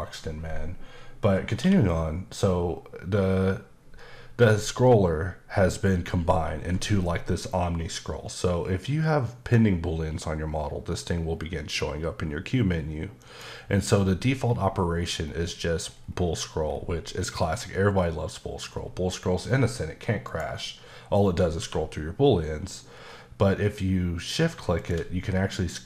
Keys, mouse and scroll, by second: 1.6 q, 13.2 click, 13.8-14.5 scroll down 4, 14.5-15.8 scroll up 9, 15.8-16.6 scroll down 4, 16.6 scroll, 16.7-17.2 scroll up 5, 18.6-19.4 scroll down 4, 19.4-20.2 scroll down 3, 20.2 right click, 21.6 q, 24.8 shift+click, 25.3-25.8 scroll up 5.